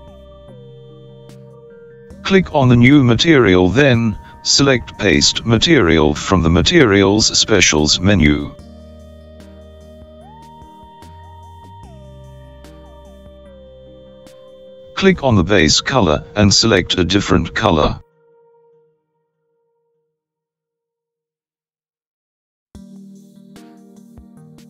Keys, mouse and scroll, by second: 9.9-13.7 drag, 17.3 click.